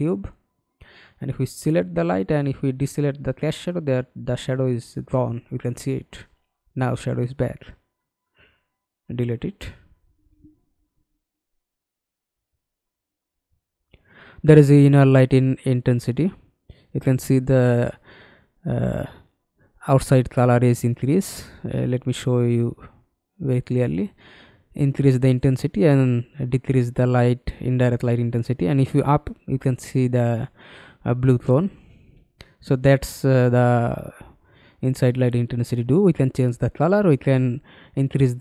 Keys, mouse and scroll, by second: 8.5 Delete, 11.7-12.4 scroll down 2, 18.9-19.3 scroll up 1, 19.3-23.1 scroll down 3, 28.5 middle click.